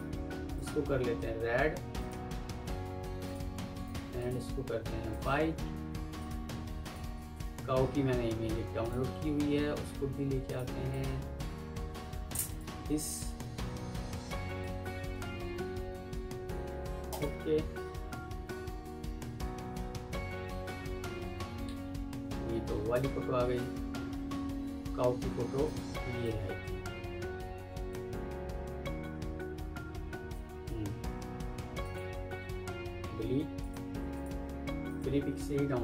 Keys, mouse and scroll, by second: 2.6 shift+right click, 3.1 alt+click, 4.1 double click, 6.1 alt+click, 7.1 alt+Tab, 10.8 double click, 20.6 F4, 22.8 Delete, 23.3 alt+Tab, 31.7 ctrl+click, 32.9 Delete.